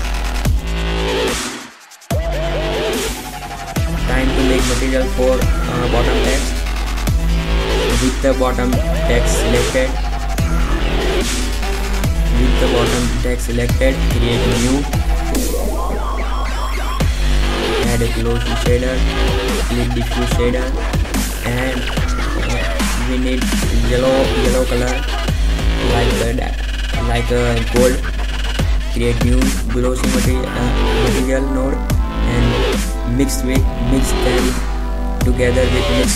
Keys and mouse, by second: 0.7 KP_0, 3.2 shift+b, 7.0 shift+z, 13.0 shift+z, 14.2 shift+z, 17.0 shift+a, 19.7 Delete, 25.4 shift+a, 29.2 shift+a, 32.9-34.7 drag.